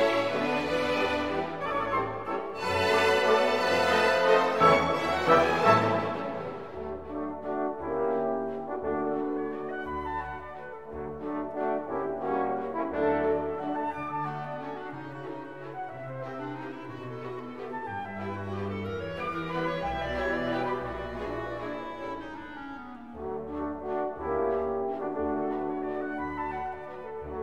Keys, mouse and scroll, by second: 0.2-1.4 typing, 1.9 click, 2.4 click, 6.9 click, 9.0 click, 14.2-15.8 typing, 16.5 click, 17.9 click, 19.4 click, 21.0-22.2 drag, 22.7-27.4 drag.